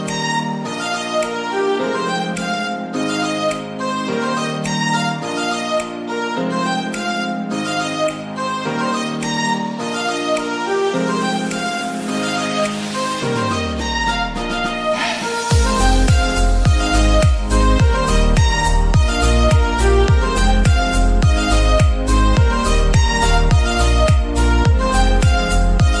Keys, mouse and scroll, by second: 0.9 z, 2.1 z, 3.6-4.2 scroll down 8, 4.2-7.8 middle drag, 5.8 shift+a, 7.1 click, 7.8 shift+a, 8.3 g, 8.6 z, 9.8 click, 12.6-17.0 drag, 13.9 1, 14.1 0, 14.2 Return, 16.2 1, 16.3 5, 16.8 0, 17.0 Return, 17.0 KP_0, 18.1-18.5 scroll down 6, 18.5-19.8 middle drag, 19.8-20.2 scroll up 2, 20.2 middle click, 20.7 g, 21.0 z, 21.5 click, 23.5-26.0 middle drag, 25.9 click.